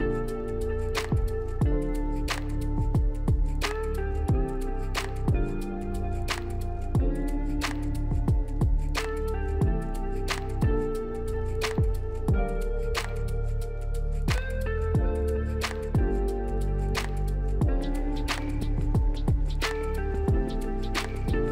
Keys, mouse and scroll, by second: 0.2 q, 1.3 ctrl+click, 2.0 middle click, 2.5 alt+middle click, 3.7 ctrl+click, 4.4 middle click, 9.2-9.9 scroll up 3, 9.9-10.2 scroll down 3, 10.5 middle click, 12.0 right click, 13.0 right click, 13.1 right click, 16.5 middle click.